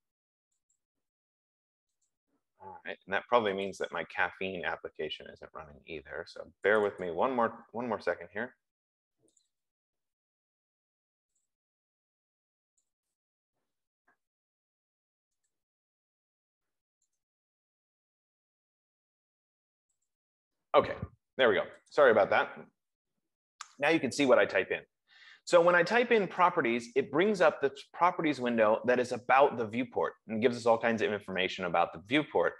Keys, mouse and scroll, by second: 1.2 click, 2.6 click, 4.0 click, 7.1 click, 7.7 click, 9.7 click, 10.0 click, 11.8 click, 12.0 click, 13.1 click, 13.4 click, 15.8 click, 17.6 right click, 20.4 click, 22.2 click, 26.7 click.